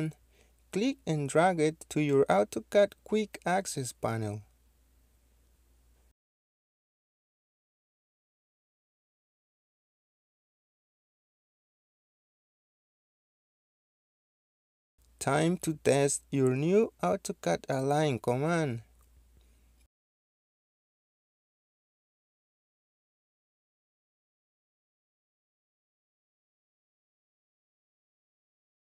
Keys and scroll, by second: 6.3-6.9 typing, 17.2 typing.